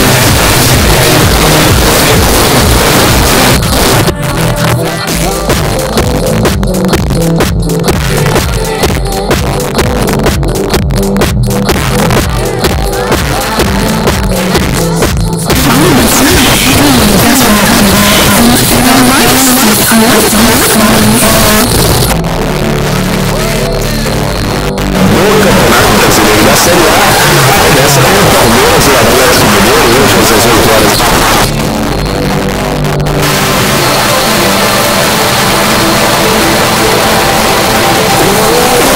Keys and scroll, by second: 3.6 Page_Down, 21.6 Page_Down, 30.9 Page_Down.